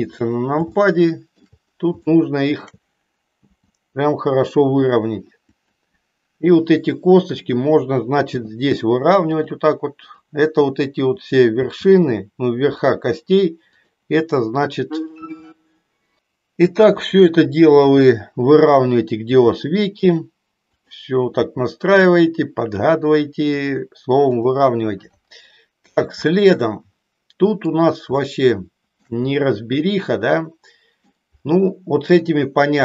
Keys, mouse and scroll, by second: 0.8 shift+middle click, 2.1 shift+middle click, 3.4 g, 5.4 click, 7.4 click, 8.4 g, 9.9-11.2 drag, 11.7 g, 12.9 click, 13.7-14.7 drag, 15.9 click, 17.1-18.1 drag, 19.2 g, 20.7-21.9 drag, 21.9 g, 23.7 click, 24.4-25.4 drag, 26.2-27.8 middle drag, 28.2-29.2 shift+middle drag, 29.9-31.2 middle drag, 32.2-32.8 drag.